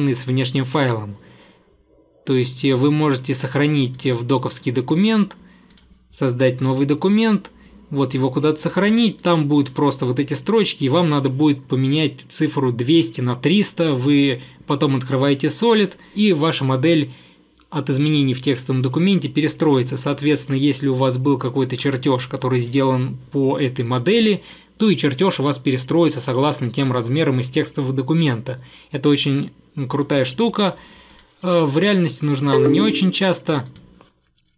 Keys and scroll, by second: 31.5 Delete.